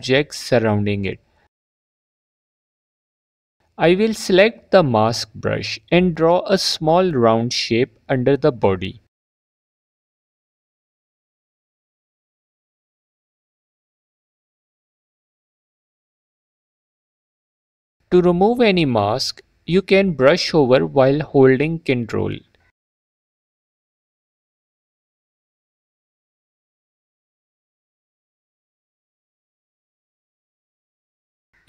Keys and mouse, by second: 1.6 /, 1.7 Tab, 2.4 f, 10.2 click, 11.9 f, 12.4 click, 20.7 click, 23.6 ctrl+click, 24.0 ctrl+click, 24.5 alt+click, 25.0 click.